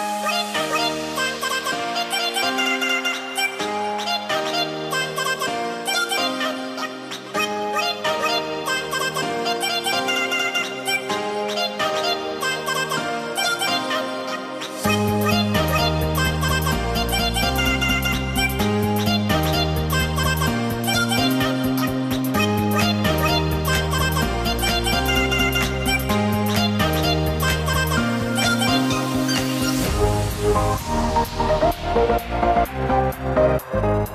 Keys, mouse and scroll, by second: 1.0 click, 1.9 click, 14.4 click, 19.8 r, 20.0-21.3 drag, 21.8 click, 22.5 shift+click, 23.4 click, 25.8 scroll up 1, 26.1 click, 26.3 v, 29.3 click, 30.9 right click, 32.3 click.